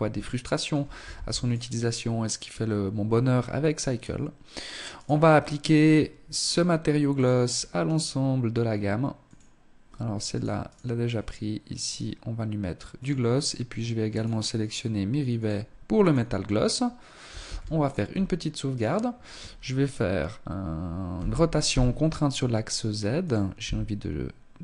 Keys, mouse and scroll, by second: 0.2 ctrl+s, 4.0 right click, 5.4 click, 7.0 right click, 8.2 click, 9.8 right click, 10.8 click, 13.3 right click, 14.4 click, 16.5 ctrl+s, 17.2-17.8 scroll down 3, 17.8 right click, 20.2 r, 22.4 click, 22.6 g.